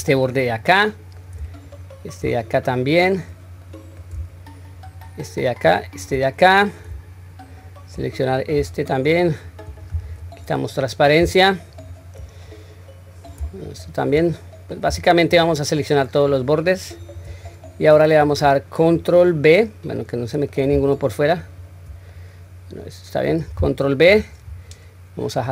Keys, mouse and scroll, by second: 0.2-1.2 middle drag, 1.7 shift+click, 2.4-3.3 middle drag, 3.7 middle click, 4.7 shift+click, 5.7 shift+click, 6.3-6.9 middle drag, 7.5 shift+click, 8.1-8.6 middle drag, 9.0 shift+click, 10.1 q, 10.7-11.2 middle drag, 11.7 shift+drag, 12.5-13.3 middle drag, 13.7 shift+click, 14.2-14.9 middle drag, 15.3 shift+click, 16.2 shift+click, 17.0 shift+click, 17.5-18.2 middle drag, 19.0-20.6 middle drag, 21.4 shift+click, 22.1-23.3 middle drag, 24.1 ctrl+b.